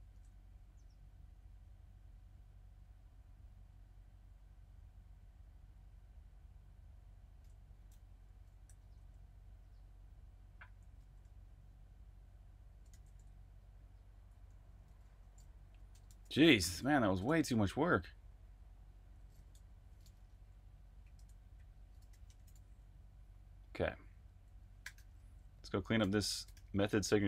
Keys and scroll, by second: 0.1 super+`, 8.7 super+`, 10.6 j, 12.9 super+j, 14.5-22.2 typing, 24.1-27.2 typing.